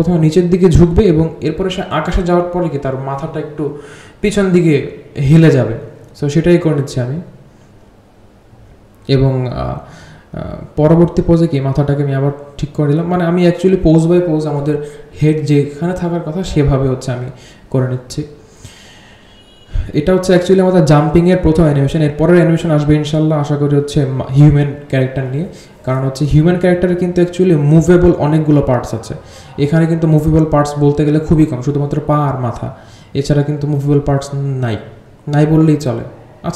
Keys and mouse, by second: 1.0 g, 2.7 drag, 3.1 drag, 3.4 space, 4.3-5.3 drag, 5.5 r, 6.7 r, 11.4 r, 11.9-12.3 drag, 12.4 r, 13.4-15.0 drag, 15.7 click, 16.1 r, 16.5-17.2 drag, 18.0-21.2 drag, 18.0 r, 21.4 r, 22.7 click, 24.0 g, 25.8-26.1 drag, 26.6-27.4 drag, 28.0 click, 28.4-30.1 drag, 30.7 click, 30.9 g, 31.6-33.9 drag, 34.6-35.8 drag.